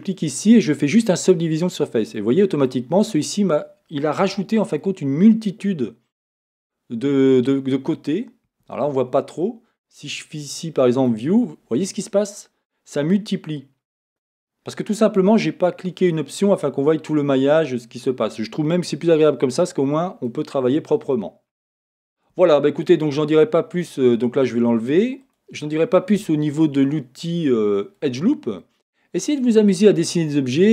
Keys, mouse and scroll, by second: 2.2-11.0 middle drag, 3.0-4.3 scroll up 2, 4.3 Tab, 7.9 Tab, 11.0 click, 11.6-25.3 middle drag, 22.4 Tab, 25.3 click, 26.0-30.7 middle drag.